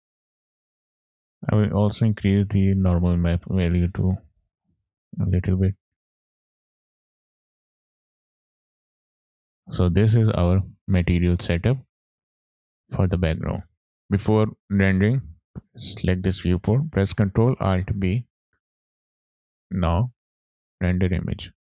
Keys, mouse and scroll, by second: 0.8 middle click, 1.4 scroll down 3, 1.5 middle click, 2.0 scroll up 3, 3.1-4.3 drag, 5.5 click, 5.9 scroll down 2, 6.0 middle click, 7.0 middle click, 8.0 scroll down 2, 9.0-9.5 scroll down 1, 9.5 middle click, 9.9 scroll down 2, 10.4 middle click, 10.7-11.2 scroll down 2, 11.2 middle click, 17.9 ctrl+alt+b, 19.5 click, 20.6 click.